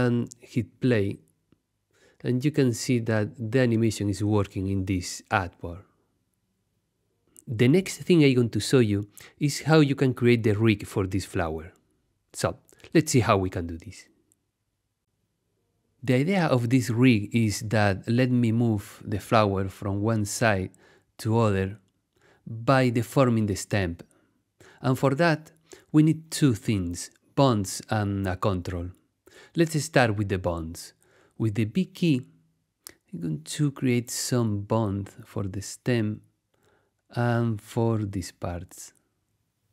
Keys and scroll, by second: 1.5 space, 6.5 Tab, 23.1 super+z, 30.7 b.